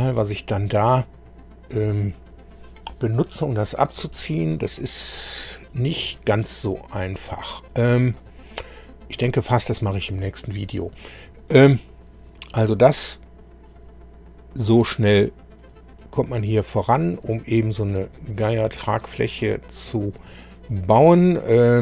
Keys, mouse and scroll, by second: 11.5-15.7 middle drag, 16.0 middle click, 17.5 shift+middle click, 18.1-20.3 shift+middle drag, 20.5 middle click.